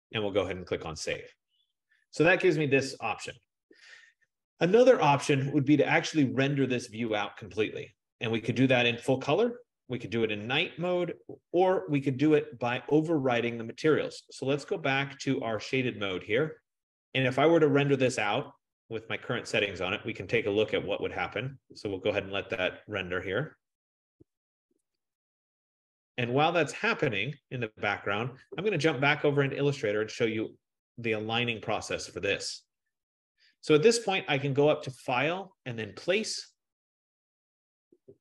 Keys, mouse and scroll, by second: 1.3 click, 12.2 click, 15.2 F15, 15.8 click, 18.3 click, 26.0 click, 30.0 click, 31.8 middle click, 33.1 middle click, 35.2 click, 35.8-36.6 scroll, 36.6 click.